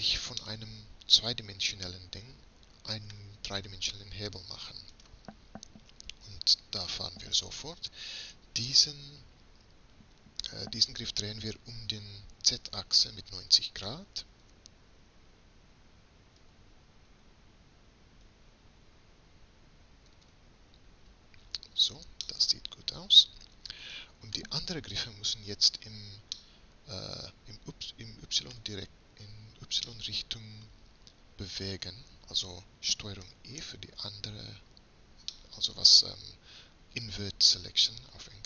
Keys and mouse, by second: 0.7-2.2 middle drag, 3.7 middle click, 5.0-7.2 right drag, 7.2-8.6 middle drag, 14.5 r, 22.4 click, 22.5 middle click, 22.8 middle click, 23.2 click, 28.4-30.0 middle drag, 30.2 middle click, 31.2-33.3 middle drag, 33.3 ctrl+i, 35.4 middle click, 37.1 middle click.